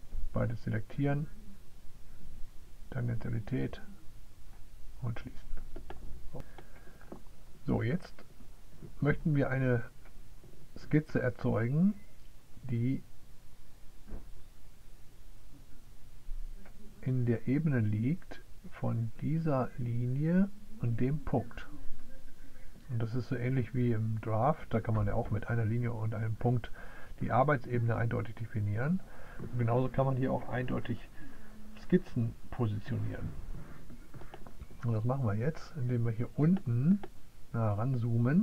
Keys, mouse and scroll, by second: 1.0 click, 3.7 click, 5.2 click, 35.4 click.